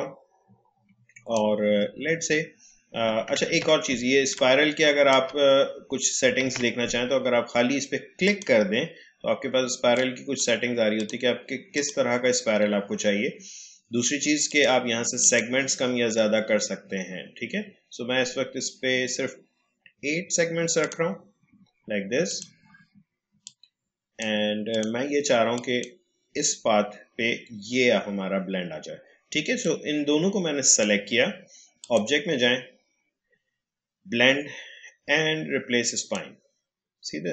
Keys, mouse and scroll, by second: 3.4 ctrl+z, 4.3-6.4 drag, 6.4 ctrl+z, 8.2 click, 14.4 click, 15.7-17.3 scroll down 1, 20.8 click, 29.9-31.8 drag, 35.9-37.3 drag.